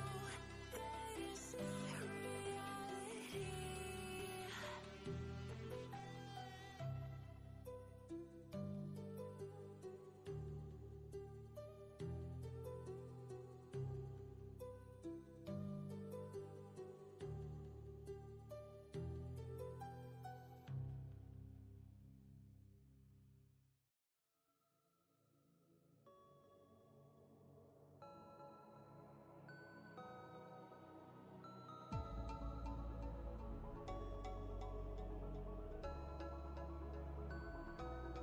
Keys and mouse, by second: 0.0-0.3 typing, 3.0 click, 3.7 ctrl+space, 3.8-4.4 ctrl+drag, 9.6 click, 13.1 click, 14.7 ctrl+space, 14.8-15.4 ctrl+click, 15.2 ctrl+space, 15.7-16.3 drag, 20.5 ctrl+space, 20.6-21.2 ctrl+click, 21.0 ctrl+space, 21.6-22.2 ctrl+click, 22.0 ctrl+space, 22.5 click, 27.3 click, 30.1 click, 33.3 Up, 35.4 Down, 37.3 click, 37.9 ctrl+space, 38.0-38.2 ctrl+click.